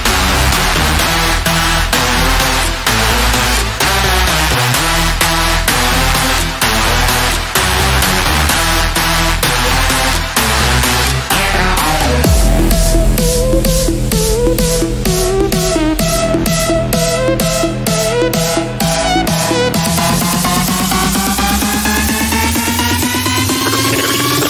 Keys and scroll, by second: 9.8 Down, 17.0 shift+F2, 17.9 Escape.